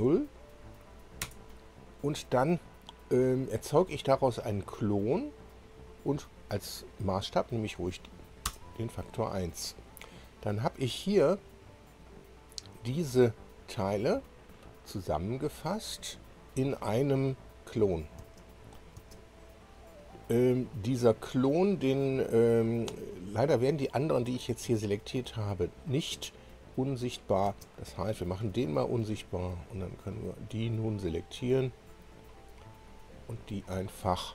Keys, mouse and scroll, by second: 1.2 Return, 6.8 click, 9.0 Return, 10.1-10.5 scroll down 2, 11.7-13.4 scroll up 8, 13.6-13.9 scroll up 2, 14.3-14.8 scroll down 2, 14.9-15.3 scroll down 2, 15.9-16.5 scroll down 2, 16.5 scroll down 2, 17.6 click, 18.8 space, 19.6 space, 20.2 click, 26.8 click, 27.5 space, 29.6 click, 30.5 click, 31.6 click, 32.9 click.